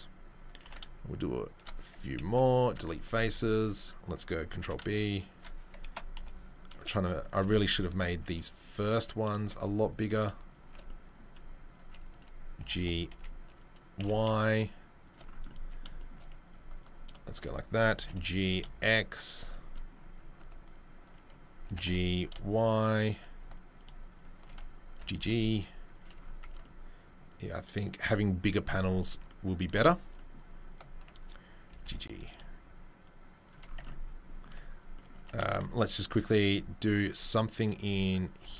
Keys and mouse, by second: 0.6 ctrl+b, 2.2 Delete, 3.1 ctrl+middle click, 3.2 ctrl+r, 4.3 ctrl+middle click, 4.6 ctrl+b, 4.8 shift+middle click, 6.1 Delete, 7.1-8.9 middle drag, 7.8 alt+click, 8.9 alt+click, 9.0 alt+middle click, 9.5 alt+middle click, 9.8 alt+click, 9.9 alt+middle click, 10.7-17.1 shift+middle drag, 12.6 g, 17.4-23.8 alt+middle drag, 18.0 g, 21.7 g, 24.4-30.4 middle drag, 25.0 g, 26.4 Tab, 28.0 Tab, 29.7 Tab, 30.4 alt+click, 31.0-38.5 middle drag, 31.7 g, 33.8 Tab, 35.1 Tab, 38.4 ctrl+r.